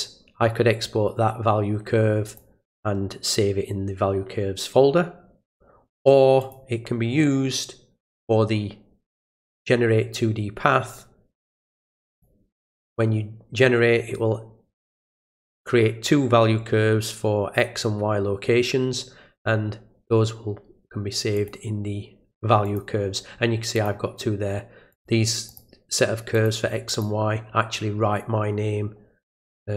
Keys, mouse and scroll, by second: 2.3 click, 6.4 click, 9.3 click, 11.8 click, 21.3 click, 22.6 click, 23.7 click, 24.9 click, 25.5 click, 26.3 click, 26.9 click.